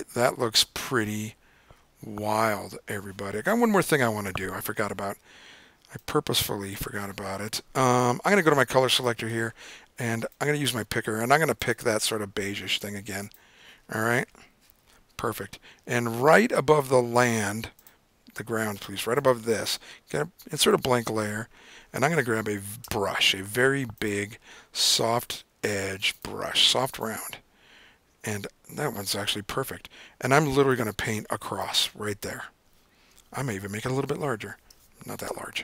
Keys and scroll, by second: 23.1 b, 33.1 super+z, 33.9 typing, 35.3 typing.